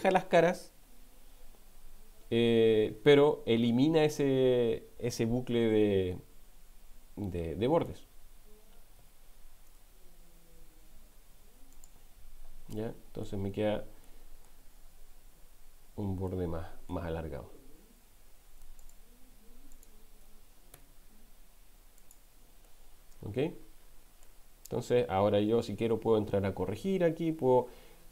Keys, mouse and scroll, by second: 9.0 x, 12.7 middle click, 14.0 middle click, 16.6 middle click, 20.8 x, 22.9-24.4 middle drag, 25.9 ctrl+r.